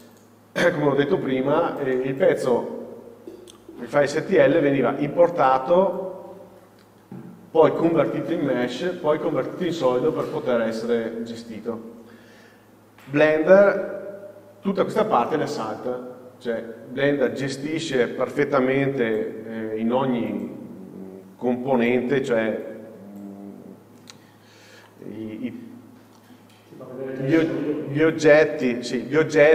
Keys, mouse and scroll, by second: 7.5-24.8 drag, 25.7-29.5 scroll up 1.